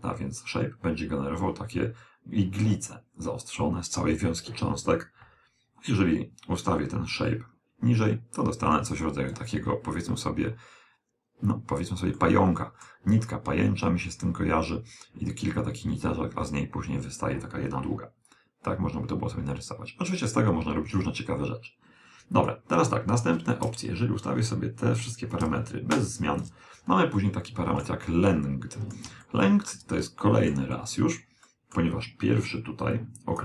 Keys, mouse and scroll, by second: 5.9 click, 12.2-14.0 middle drag, 18.3 click, 23.6 click, 25.4 click, 27.3-33.1 middle drag, 32.9 click.